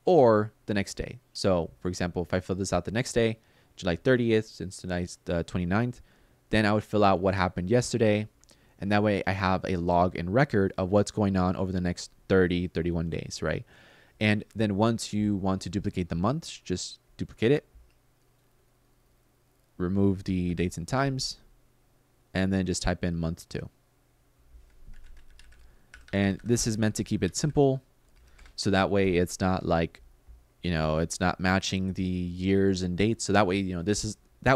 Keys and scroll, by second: 20.2 BackSpace, 24.4-28.4 typing.